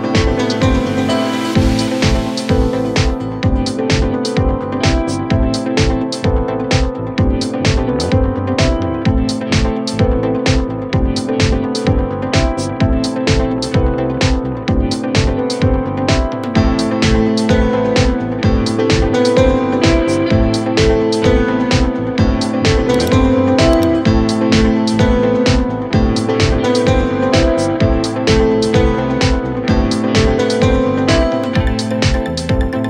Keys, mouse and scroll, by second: 10.0 Return, 27.8 ctrl+t.